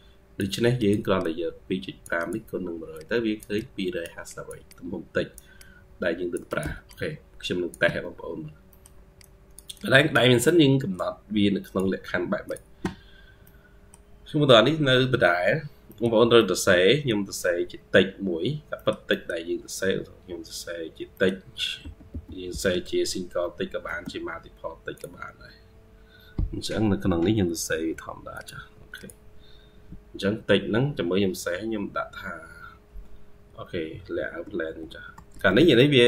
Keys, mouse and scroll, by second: 1.1 double click, 2.8 ctrl+q, 4.5 double click, 6.7 double click, 7.7 Escape, 8.2 scroll down 1, 8.5 middle click, 9.6 double click, 13.3 middle click, 14.8-15.7 scroll up 2, 15.7 middle click, 16.2 middle click, 18.2-19.0 scroll down 3, 19.0 middle click, 20.2-21.0 scroll up 3, 21.0 middle click, 21.7 typing.